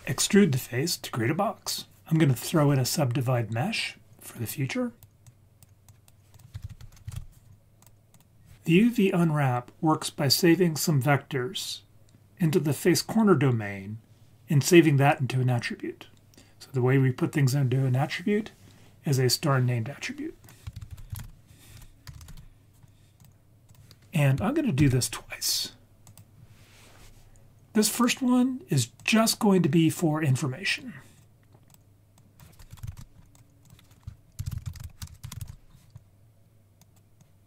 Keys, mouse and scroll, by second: 4.5-5.0 drag, 5.3 click, 5.9 click, 6.3 click, 6.7 shift+a, 20.4 click, 20.8 shift+a, 22.1 BackSpace, 24.8 shift+d, 26.1 click, 27.9-29.1 drag, 29.7-30.9 scroll up 1, 30.9 scroll up 1, 31.2-31.8 drag, 32.2 click, 33.3-34.9 drag, 34.9 right click, 35.1 BackSpace, 36.8 click, 37.2 click.